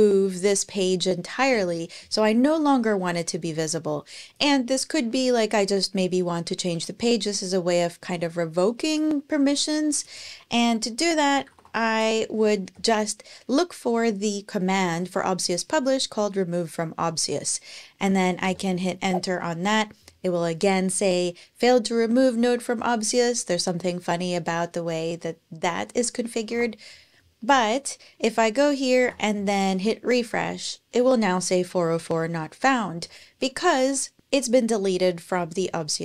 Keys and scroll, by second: 10.7-11.9 typing, 12.5 Page_Down, 18.2 Return, 26.3 super+Tab, 28.8 shift+super+r.